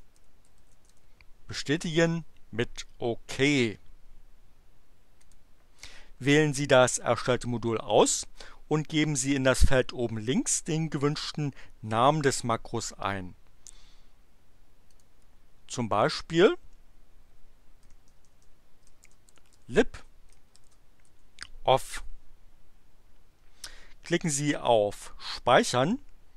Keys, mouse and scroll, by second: 0.0-1.4 typing, 5.2 click, 14.8 click, 15.9 click, 17.8-21.1 typing.